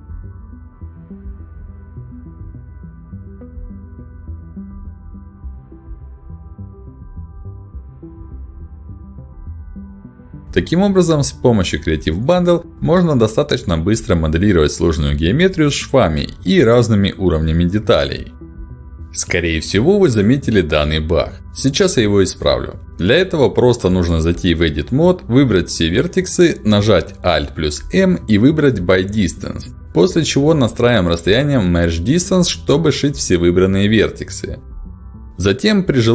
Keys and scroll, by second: 2.8 ctrl+shift+x, 7.9 space, 10.5 Escape, 27.8 alt+m.